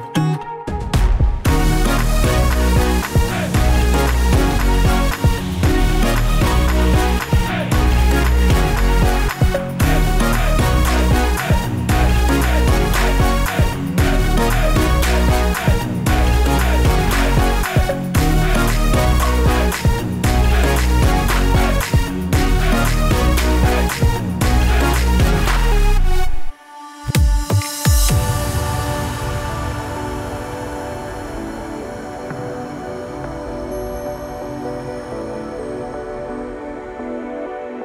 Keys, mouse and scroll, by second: 1.6 click, 2.3-2.8 scroll down 1, 2.8 click, 3.3 click, 5.0 click, 5.7 click, 6.2 click, 8.8 click, 9.1 scroll up 2, 9.6 middle click, 10.2 scroll up 2, 10.7 shift+middle click, 11.7 click, 12.1 Tab, 12.9 click, 15.1 click, 15.8 click, 16.5 ctrl+b, 17.9 Tab, 18.0 middle click, 18.3 KP_0, 18.8 middle click, 19.4-19.8 scroll down 5, 19.8 click, 20.3 click, 20.8 click, 21.2 click, 21.7 shift+a, 23.4 click, 24.1 s, 25.5-26.2 scroll down 2, 26.2 click, 26.2 scroll down 1, 26.7 click, 27.1 click, 28.0 click, 28.4 s, 29.3 KP_0, 30.3 click, 31.7 scroll down 3, 31.9 middle click, 32.3-32.7 scroll down 2, 32.7 middle click, 33.4 click, 33.8 click, 34.2 shift+a, 36.1 click, 36.9 click.